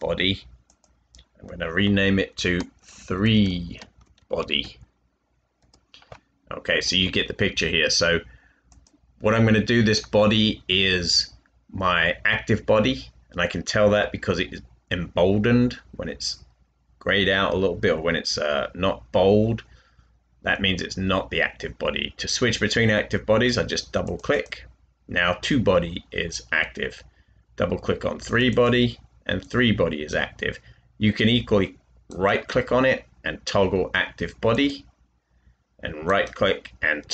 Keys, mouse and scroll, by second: 2.7-4.5 typing, 5.5 Return, 31.6-32.4 typing.